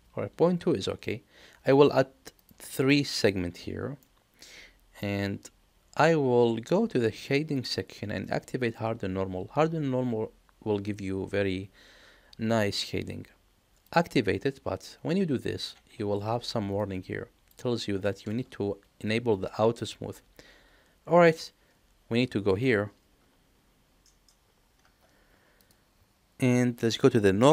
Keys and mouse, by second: 2.4 click, 2.8 click, 4.0-5.0 middle drag, 7.5 click, 13.8 click, 25.6 click.